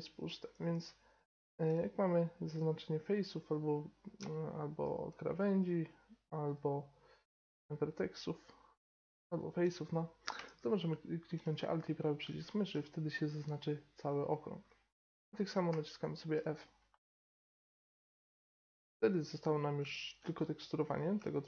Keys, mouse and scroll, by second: 0.5 middle click, 2.5-4.9 drag, 5.2-7.2 right drag, 6.8-10.2 drag, 9.2-11.9 right drag, 11.9-15.6 middle drag, 15.6 f, 16.1-18.1 middle drag, 19.0-20.7 drag, 20.7 middle click, 20.8 right click, 20.9-21.4 middle drag.